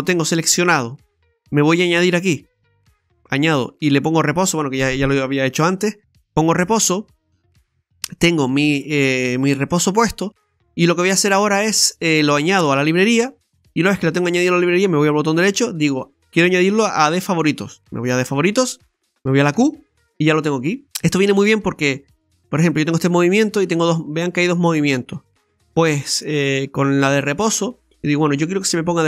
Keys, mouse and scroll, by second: 2.0 click, 3.8 click, 12.5 click, 14.6 right click, 21.6 r.